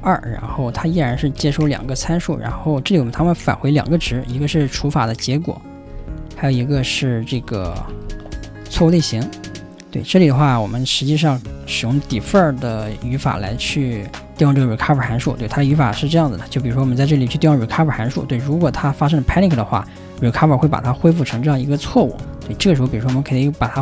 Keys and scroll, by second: 0.4 6, 0.9 ,, 1.9 4, 5.9 ,, 11.9 typing, 22.5 typing.